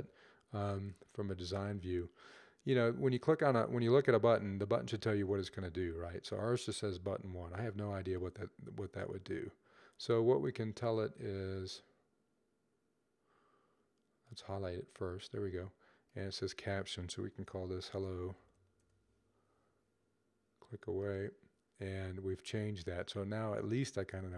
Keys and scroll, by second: 17.6-18.5 typing.